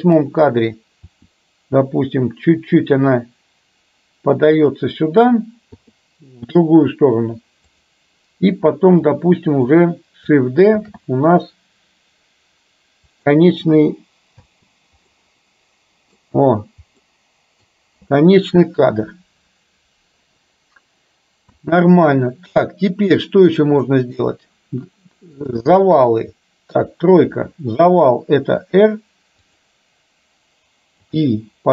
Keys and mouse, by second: 1.1 r, 5.8 i, 7.7 click, 9.2-9.7 drag, 10.8 shift+d, 14.5 space, 15.2-16.2 middle drag, 17.1-17.7 middle drag, 21.6 space, 22.1 middle click, 24.0-24.3 middle drag, 25.6 click, 26.7 KP_3, 28.6 r, 31.1 i.